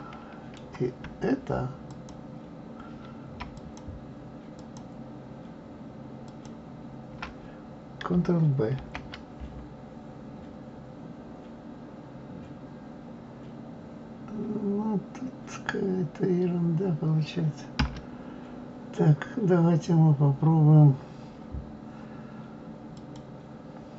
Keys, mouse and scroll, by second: 1.9 shift+click, 3.5 alt+shift+click, 4.6 alt+shift+click, 6.2 alt+shift+click, 8.8 ctrl+b, 22.9 click.